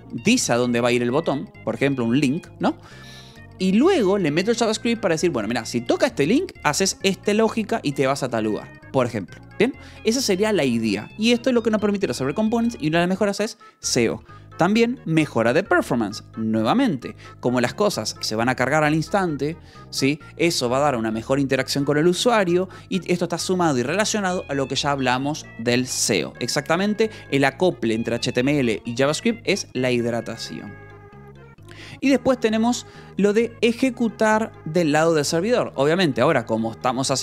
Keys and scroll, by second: 36.1 Escape.